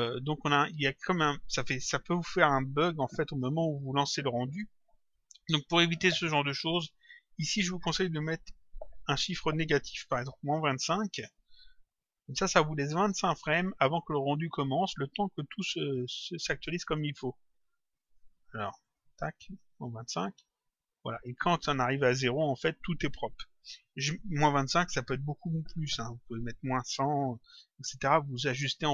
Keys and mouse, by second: 7.3 click, 10.5 Return, 12.7 click, 16.5 click, 18.0 click, 20.1 click, 21.2 click.